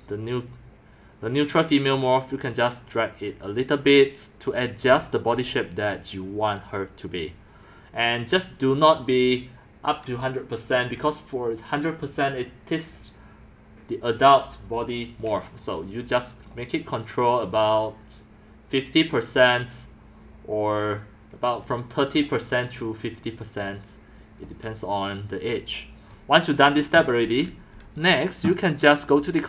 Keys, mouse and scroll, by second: 4.5 click, 4.9 typing, 5.4-9.3 drag, 11.3-13.5 drag, 16.5 click, 22.2-24.4 drag, 26.4 click, 26.6 click, 26.8-27.3 scroll, 27.0-28.0 typing, 28.0-29.4 drag.